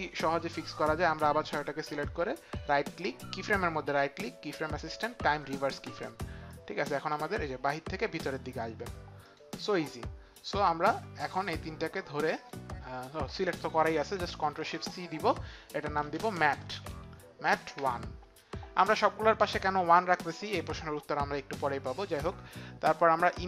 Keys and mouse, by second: 0.0 click, 4.2 click, 5.4 right click, 6.4 click, 7.0 space, 9.2 click, 10.5 click, 11.5 shift+click, 12.4 shift+click, 14.4 ctrl+shift+c, 15.8-16.9 typing, 18.2 Return, 18.2 KP_1.